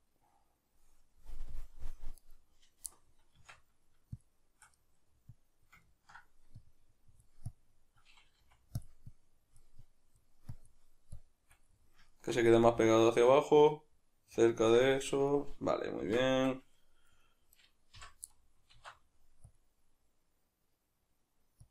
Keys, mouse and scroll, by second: 2.3 right click, 2.9-4.2 middle drag, 3.4 Tab, 4.2 shift+click, 4.8 middle click, 5.3 click, 5.9 ctrl+middle click, 6.6-8.9 drag, 8.4 f, 9.1-11.7 drag, 11.7-17.5 middle drag, 16.0 Tab, 16.3 a, 17.5 right click, 18.0 l, 18.3-21.7 middle drag, 18.7 alt+e.